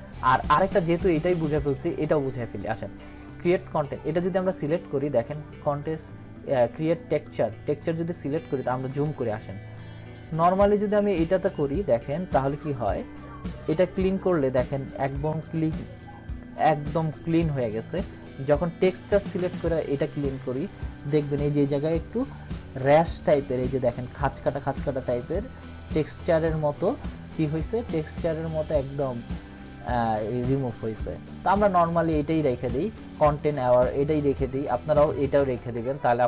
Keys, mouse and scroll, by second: 0.2 scroll up 1, 4.1 click, 5.1 scroll up 1, 8.6 ctrl+=, 11.4 click, 19.1 click, 24.0 scroll down 1, 35.3 ctrl+-.